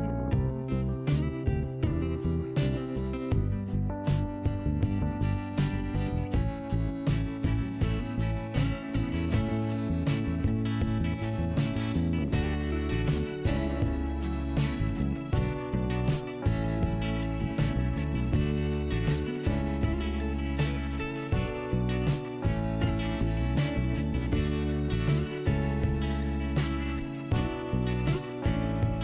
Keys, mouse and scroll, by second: 0.2 click, 5.1 click, 6.2 click, 9.8 scroll down 1, 10.5-11.1 scroll up 1, 11.4 click, 12.5 click, 13.3 click, 14.5 click, 15.0-16.0 scroll down 1, 16.1 click, 17.9 click, 20.3 click, 20.5 click, 21.5 click, 22.2 scroll up 1, 22.7 click, 23.9 click.